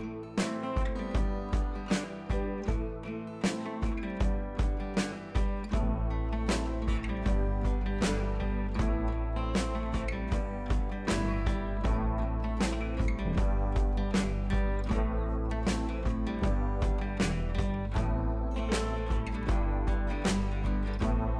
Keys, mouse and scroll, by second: 1.2 click, 2.6-3.0 scroll up 1, 3.0-6.2 drag, 8.5 click, 12.3 click, 12.5 scroll up 1, 13.2-14.6 drag, 15.6 scroll down 1, 16.1-16.9 drag.